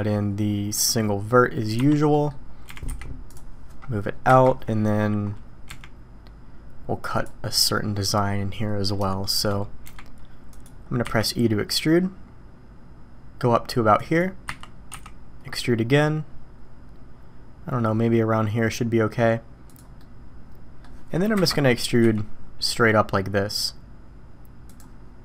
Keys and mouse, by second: 1.7 1, 2.1 drag, 2.6 g, 4.3 KP_1, 5.7 g, 9.1 shift+middle drag, 9.9 g, 11.0 e, 14.5 e, 20.0-20.8 middle drag, 21.3 KP_1, 22.0 e.